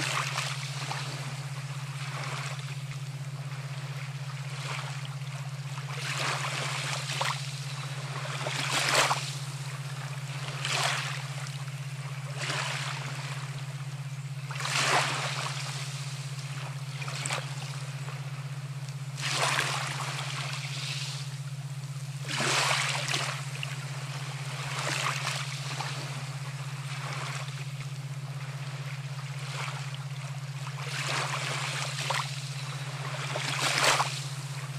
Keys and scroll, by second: 22.1 ctrl+alt+Delete, 28.8 ctrl+alt+shift+e.